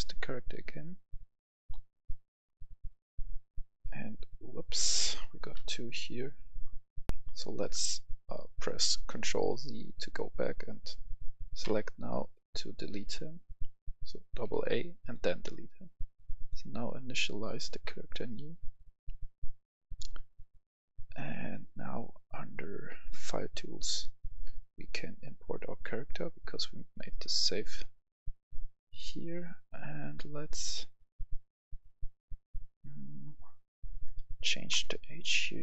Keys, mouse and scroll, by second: 2.5-3.3 scroll down 1, 3.4 scroll down 1, 5.5 ctrl+z, 7.0 F11, 7.1 F10, 11.6 x, 12.9 a, 13.3 a, 14.0 a, 14.5 x, 14.9 click.